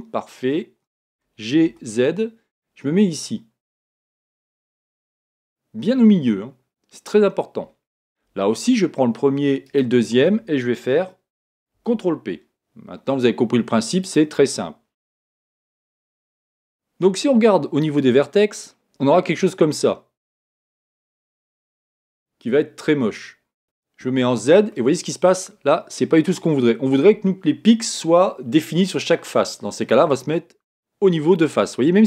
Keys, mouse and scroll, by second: 1.1 g, 1.6 g, 4.4 click, 5.9-7.1 middle drag, 9.6-11.7 right drag, 11.7 ctrl+p, 18.6 click, 24.0 z, 24.7-26.6 middle drag.